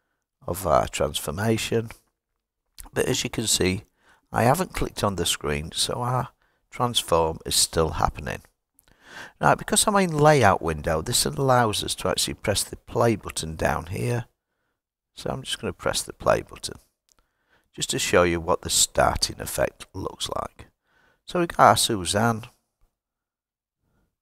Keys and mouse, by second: 23.5 click.